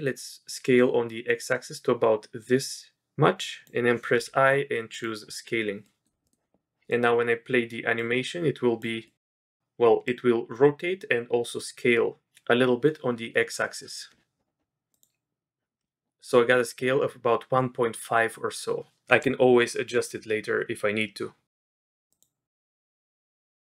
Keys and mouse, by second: 4.1 i, 5.8 middle click, 6.2 middle click, 6.9 middle click, 8.0 click, 9.0 middle click, 10.0 click, 14.9 click, 22.1 click.